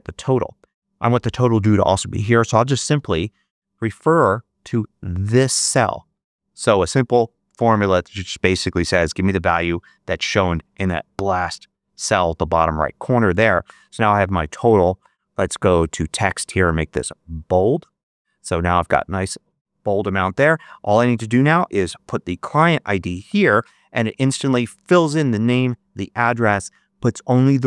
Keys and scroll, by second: 2.8 =, 11.0 Return, 21.9 7, 23.2 Return.